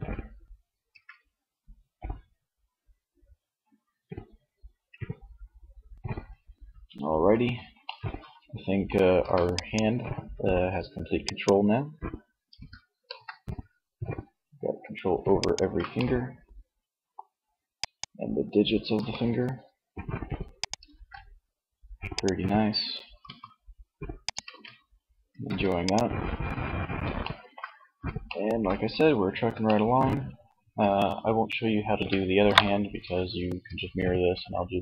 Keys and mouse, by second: 0.0 Tab, 8.4 ctrl+s, 11.7 r, 14.6 ctrl+z, 18.1 r, 19.7 click, 19.9 ctrl+z, 22.2 r, 23.6 ctrl+z, 24.4 ctrl+s, 27.4 ctrl+s.